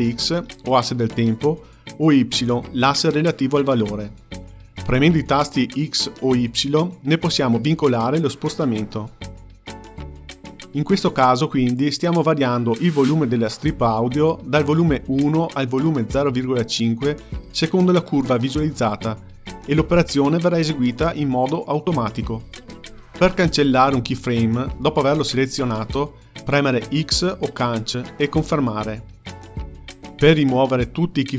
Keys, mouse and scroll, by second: 5.8 click, 23.9 click, 24.7 click, 27.3 x.